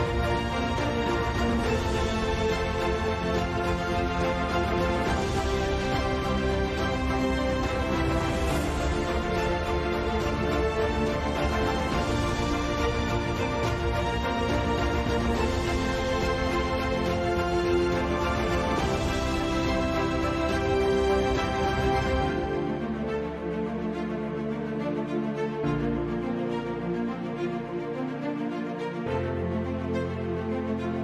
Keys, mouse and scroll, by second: 0.0 Tab, 0.4 KP_5, 1.5 click, 3.3-3.9 middle drag, 5.2 KP_7, 5.3 KP_5, 6.0 Tab, 6.3 k, 12.9-14.3 drag, 13.0 z, 13.4 z, 13.6 z, 14.3 z, 14.4 ctrl+Delete, 15.5 g, 18.0 g, 19.3-23.0 typing, 22.7 click, 24.6 click, 25.2 c, 26.4 click, 26.6 z, 27.0 s, 28.0-28.8 ctrl+z, 30.6 z, 30.8 z.